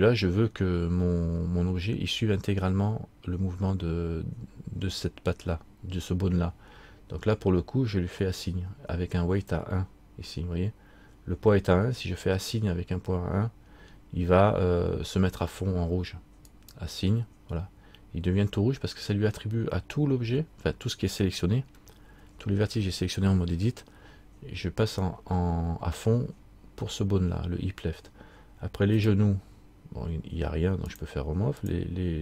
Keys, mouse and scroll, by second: 16.6 click, 29.1 click.